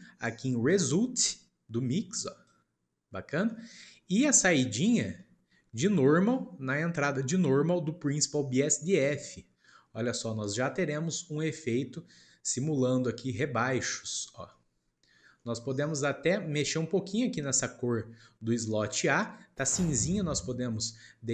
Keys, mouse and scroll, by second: 3.4-4.3 shift+middle drag, 4.3 click, 5.1-6.3 shift+middle drag, 6.3 click, 10.3 scroll up 1, 11.1 scroll down 2, 11.4-18.4 middle drag, 18.9 click.